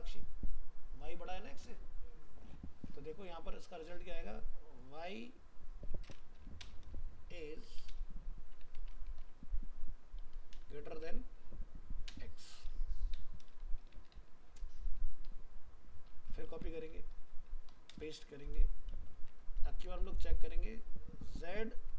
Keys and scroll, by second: 16.5 ctrl+c, 18.2 ctrl+v.